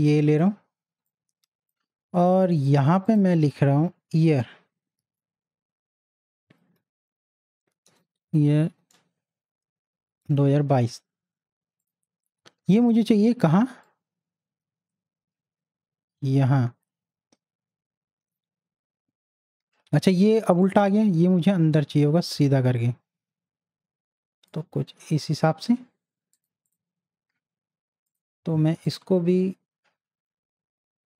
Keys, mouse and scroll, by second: 0.1 click, 0.4 space, 1.1-2.5 drag, 2.5 t, 2.7 click, 5.0 Caps_Lock, 5.6-7.9 typing, 11.8 space, 14.1-23.8 drag, 26.3-31.1 drag.